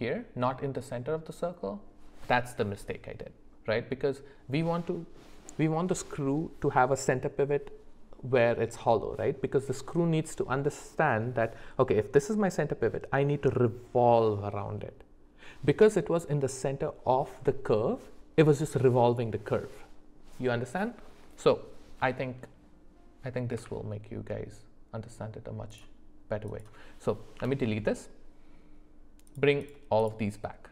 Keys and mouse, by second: 23.5 Tab, 27.4 Delete, 29.3 click, 29.6 click, 30.0 click.